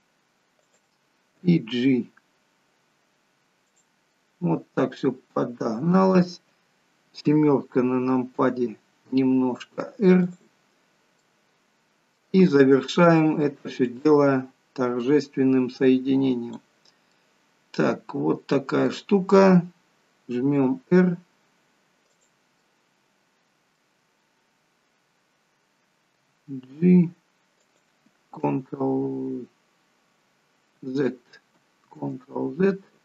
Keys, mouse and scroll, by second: 1.3 g, 4.1 middle click, 6.2-7.2 scroll down 1, 10.2 r, 11.2 middle click, 13.8 click, 17.1 middle click, 20.6 r, 22.6 middle click, 26.2 g, 31.0 ctrl+z, 32.1 ctrl+z.